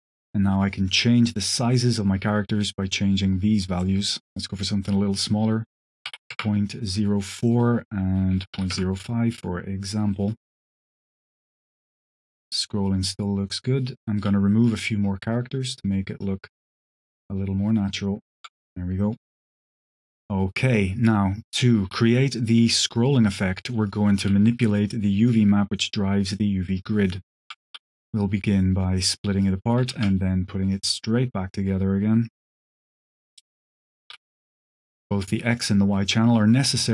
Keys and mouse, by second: 0.6 click, 3.6-6.8 drag, 7.3-9.2 drag, 10.0 click, 11.3-14.1 shift+drag, 14.4 click, 16.1-18.3 shift+drag, 18.9 click, 20.0 click, 20.5 click, 20.8 click, 21.2 click, 21.7 g, 23.2 click, 23.7 click, 24.1 g, 26.5 click, 27.5 q, 30.0 shift+a, 33.0 click, 33.5 click, 33.9 g, 34.8 click, 35.4 click, 36.8 click.